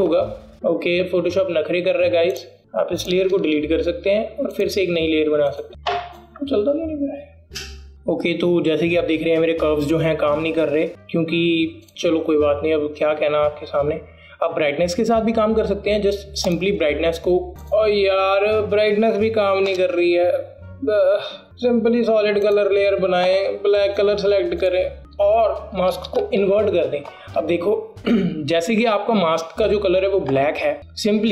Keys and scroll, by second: 4.6 BackSpace, 8.1 BackSpace, 20.8 BackSpace, 27.8 ctrl+alt+i.